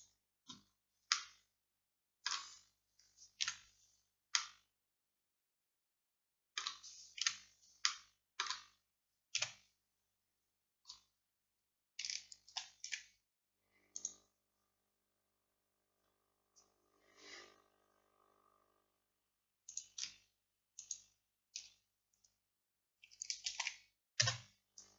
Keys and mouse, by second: 1.2-6.7 middle drag, 3.5 KP_5, 7.3 KP_5, 9.4 KP_1, 12.6 shift+s, 23.5-24.9 middle drag, 23.5 shift+d.